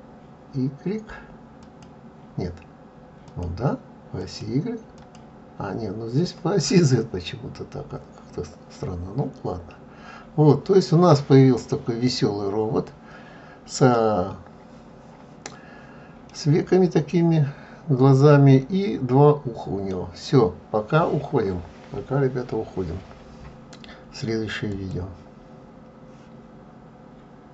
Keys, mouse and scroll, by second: 6.9 middle click, 16.4 middle click.